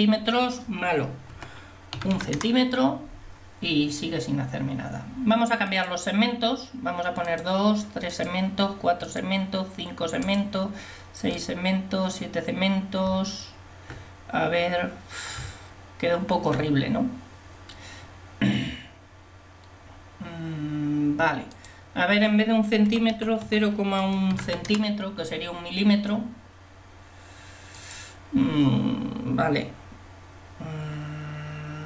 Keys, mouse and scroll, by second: 13.2 Tab, 15.4 Tab, 21.6-31.8 drag.